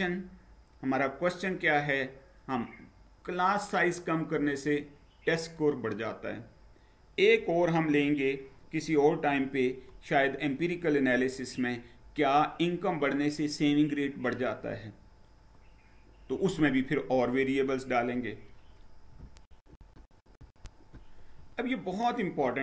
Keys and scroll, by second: 19.4 shift+F9, 20.4 shift+F9.